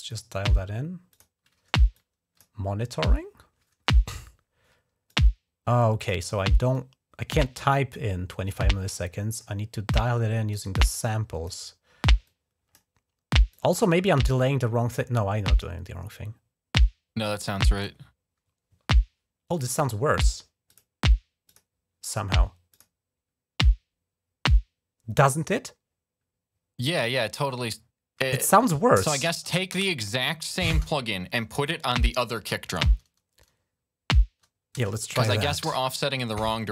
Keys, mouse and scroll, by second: 0.2 right click, 0.9 click, 1.8 click, 2.7 scroll up 2, 4.9-5.9 drag, 6.5 click, 8.3 click, 9.8 click, 10.9 click, 12.1 click, 13.3 click, 14.8-17.6 drag, 20.5 click, 21.3 click, 22.5 click, 29.2 click, 29.7 space, 30.5 space, 34.6 space.